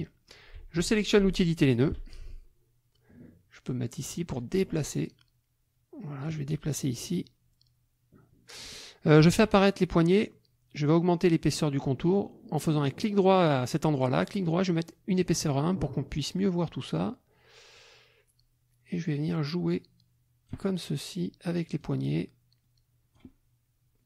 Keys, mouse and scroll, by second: 1.7 click, 3.7-6.4 drag, 7.2-8.7 drag, 9.3 ctrl+a, 14.2 right click, 15.2 click, 15.7 click, 16.1 click, 17.8-20.7 drag, 21.8-23.3 drag.